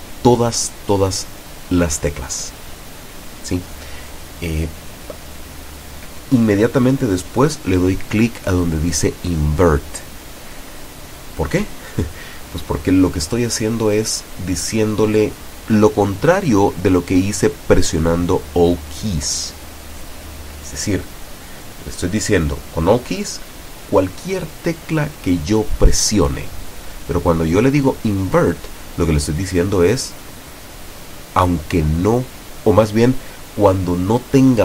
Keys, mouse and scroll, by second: 1.8 click.